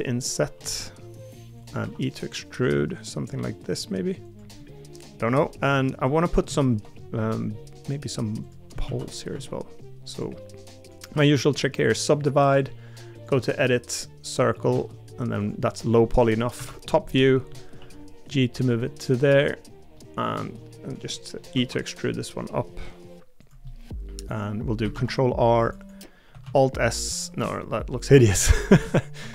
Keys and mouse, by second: 4.6 middle click, 5.5 middle click, 6.0 middle click, 6.6 shift+middle click, 7.0 middle click, 8.8 shift+d, 9.3 s, 11.9-16.6 right drag, 16.6 KP_7, 17.8 g, 19.9 middle click, 21.1 middle click, 23.6 middle click, 24.9 ctrl+r, 26.4 alt+s, 29.2 s.